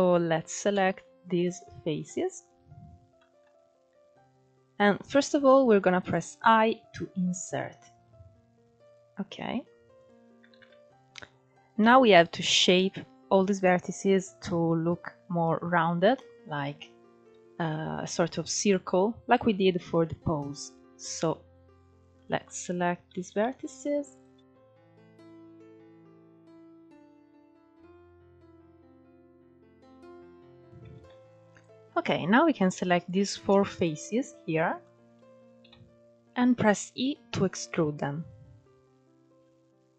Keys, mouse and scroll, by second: 1.0-2.2 shift+drag, 2.9 shift+middle click, 3.3-5.6 scroll up 1, 10.2 alt+z, 10.8-11.3 scroll up 2, 11.3 scroll down 2, 16.9-17.4 scroll up 2, 17.4 shift+middle click, 18.1-18.6 scroll down 1, 18.6 scroll down 5, 19.6-20.7 scroll up 4, 20.7 ctrl+1, 21.1 scroll up 2, 21.8 click, 22.1 shift+click, 22.8 shift+v, 23.8 click, 24.1-29.5 typing, 24.6 click, 25.5 click, 26.1 click, 26.6 click, 26.8 click, 27.2 click, 28.0 click, 28.7 click, 29.4 click, 29.8 scroll down 7, 29.9 middle click, 30.2 scroll up 3, 30.3 shift+middle click, 30.6 ctrl+3, 31.2-32.2 drag, 32.6 shift+click, 33.1 shift+click, 33.9-34.3 scroll up 2, 34.3 scroll down 3, 34.5 middle click, 35.3 KP_3, 35.9-37.3 scroll up 2, 37.3 e.